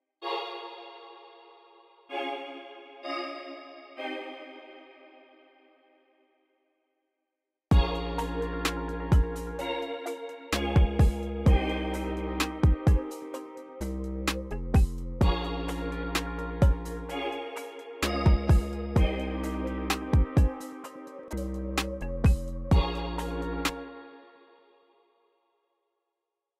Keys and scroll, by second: 1.7 alt+super+s, 3.3 x, 4.7 y, 13.9 y, 15.6 y, 23.3 space, 23.9 c, 24.8 u, 26.3 u.